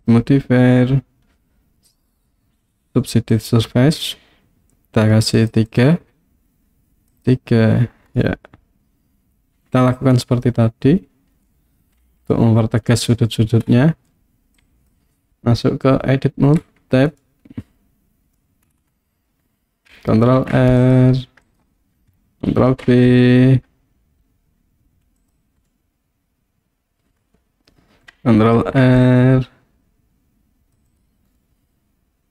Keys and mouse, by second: 0.1-3.6 drag, 5.5 click, 5.7 click, 7.1 click, 8.2-10.2 middle drag, 12.0 KP_1, 14.6 click, 16.6 Tab, 17.2-18.4 middle drag, 20.3 ctrl+r, 21.5 right click, 22.6 ctrl+b, 25.2 click, 25.7-27.3 middle drag, 28.6 ctrl+r, 30.9 click, 31.5-32.3 middle drag.